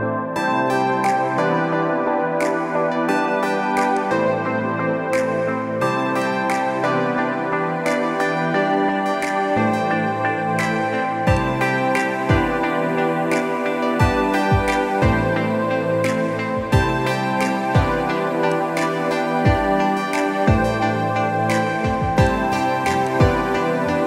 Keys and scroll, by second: 1.1 Delete, 2.5 ctrl+d, 7.6 Delete, 9.0 ctrl+d, 17.4 z.